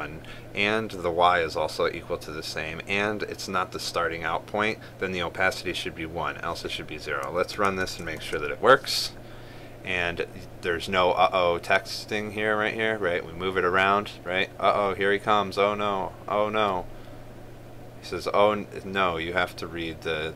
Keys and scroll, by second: 8.4 ctrl+s.